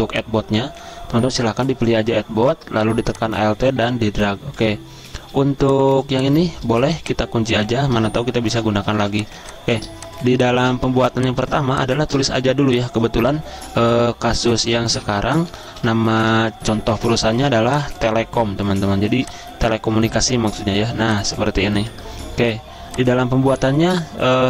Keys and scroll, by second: 5.5 z, 6.6 v, 8.3-9.0 typing, 11.6 space, 12.4 t, 14.4-16.2 typing.